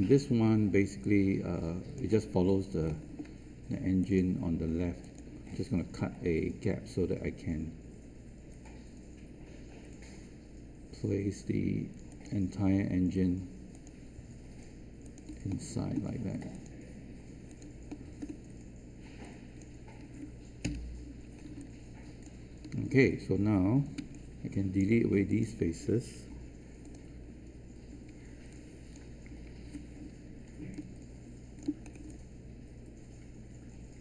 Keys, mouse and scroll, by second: 1.0 alt+click, 2.8 alt+middle click, 4.0 click, 15.4 alt+middle click, 16.5 click, 17.8 alt+middle click, 19.2-20.2 drag, 20.6 Return, 21.2 scroll down 1, 21.6 alt+click, 23.9 q, 24.1 right click, 25.2-26.2 drag, 26.2 Delete, 26.8 click, 27.9 Delete, 28.4 click, 29.2 typing, 30.7 alt+click, 31.8 scroll up 1, 32.0-34.0 alt+drag.